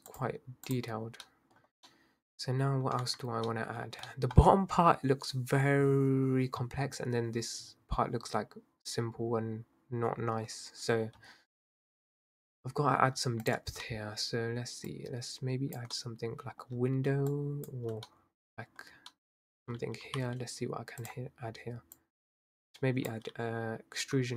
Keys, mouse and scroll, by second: 0.1-1.3 drag, 1.3 middle click, 1.6-1.9 scroll up 2, 1.9-3.0 middle drag, 3.0 scroll up 1, 3.0 Tab, 3.5-3.8 middle drag, 3.8 scroll down 2, 4.1-7.1 middle drag, 12.8-13.2 scroll up 1, 13.2 Tab, 13.5 click, 13.9-14.9 middle drag, 14.9 drag, 16.0-17.3 middle drag, 17.3 shift+click, 18.1-20.0 middle drag, 22.0 click.